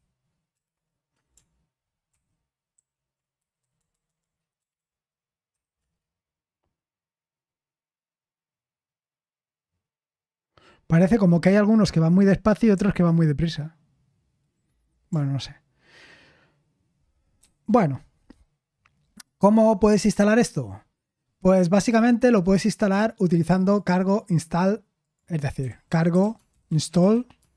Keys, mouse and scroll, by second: 0.7 BackSpace, 2.1 ctrl+c, 2.7 ctrl+p, 3.7 Left, 4.5 Left, 4.7 Left, 5.5 Left, 5.7 Left, 19.9-20.9 scroll up 2, 27.4-27.5 typing.